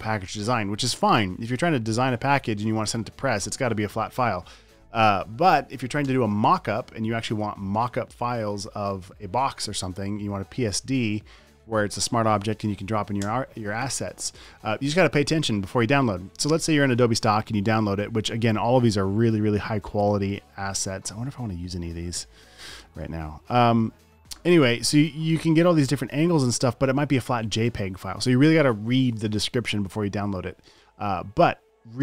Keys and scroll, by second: 0.5 Up, 2.6 Down, 6.6 space, 8.2 space, 11.4 Down, 13.6 space.